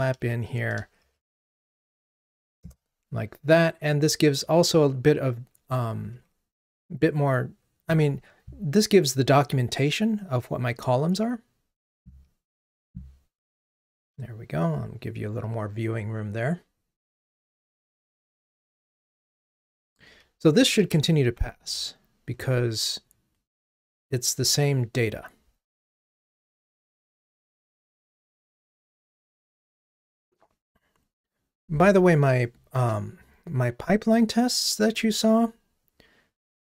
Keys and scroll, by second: 2.8 Return, 21.6 ctrl+r.